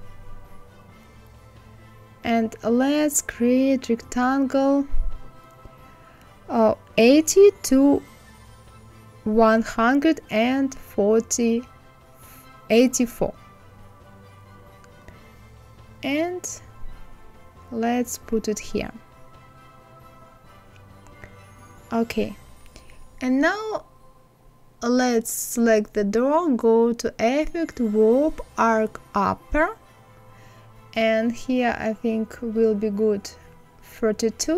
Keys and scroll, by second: 5.0 KP_8, 5.4 KP_0, 9.1 KP_1, 9.6 KP_8, 9.8 KP_4, 18.4 Left.